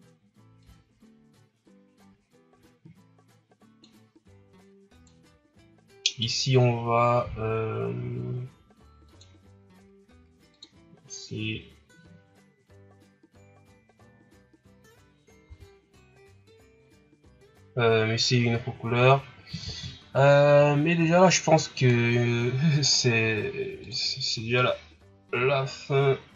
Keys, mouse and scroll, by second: 0.6-3.7 drag, 4.9 right click, 6.3 click, 15.4 a, 21.7 right click, 23.7 click.